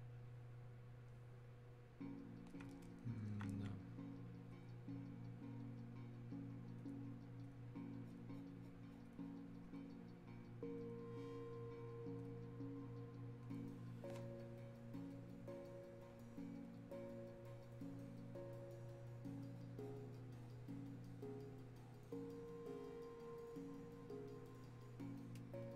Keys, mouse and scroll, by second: 2.9-4.6 alt+drag, 6.8 click, 22.1-25.7 drag.